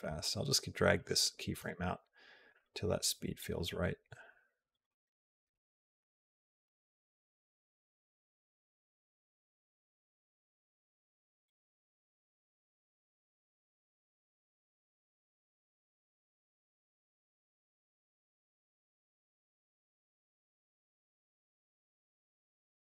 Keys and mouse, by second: 1.4 space, 5.8 g, 11.4 click, 16.6 g, 17.7 click.